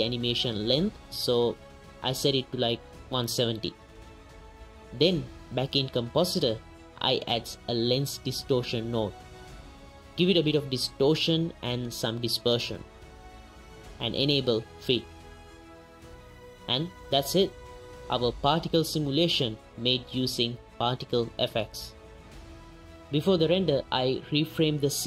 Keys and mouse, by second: 0.0-0.6 right drag, 1.1-4.7 right drag, 5.2-6.1 right drag, 7.7 right click, 8.2 right click, 8.8 right click, 9.1 middle click, 10.3 right click, 11.1 shift+right click, 12.0 shift+click, 15.6 click, 16.4 shift+click, 17.0 shift+click, 17.6 ctrl+s, 18.6 click, 23.3 click, 23.8 KP_0, 23.9 drag, 24.3 z, 24.7 drag.